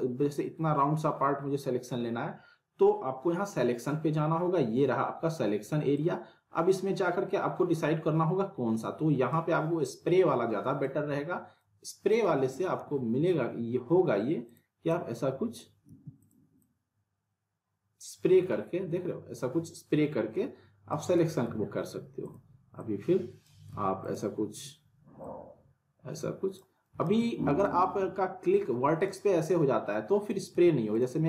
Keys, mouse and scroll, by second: 5.9-9.4 drag, 12.8 ctrl+z, 14.4 click, 15.9 ctrl+z, 16.2-21.0 drag, 21.4 z, 22.2 click, 23.7 ctrl+z, 24.0-26.8 drag, 27.1 ctrl+z, 27.6 click, 30.5 ctrl+z, 30.9-31.2 drag.